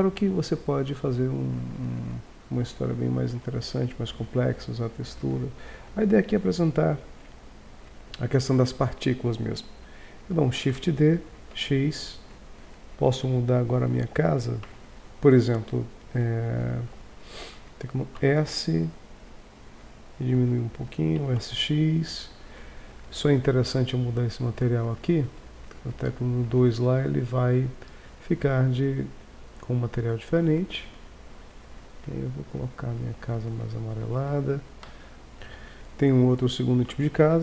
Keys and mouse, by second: 2.6-3.2 middle drag, 3.3 KP_1, 10.6 shift+d, 12.5 Tab, 14.6 Tab, 18.2 s, 21.2 s, 28.7 click, 35.3 Tab.